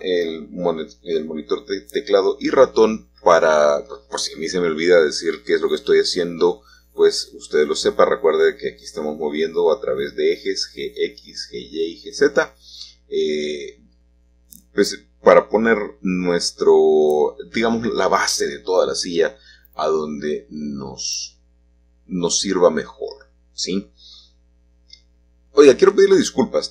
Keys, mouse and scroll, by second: 1.1-2.5 drag, 2.5 shift+middle click, 2.5-3.2 scroll down 1, 9.4-11.6 drag, 11.8-19.1 drag, 15.9 typing, 19.1 typing, 19.2-21.4 drag, 21.4 typing, 21.5-23.4 drag, 23.4-25.9 scroll up 1, 25.9-26.6 scroll up 1, 26.6 Tab.